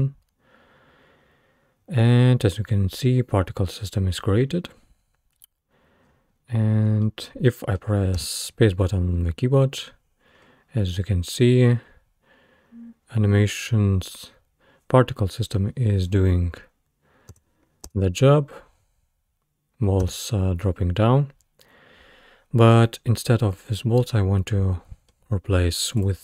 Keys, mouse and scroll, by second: 6.1-7.1 scroll down 9, 7.1-8.2 middle drag, 8.2 space, 10.4-10.7 scroll up 2, 17.4 space, 17.9 space, 20.0 space, 24.0-25.3 middle drag, 25.3-26.0 scroll down 3, 26.0 click.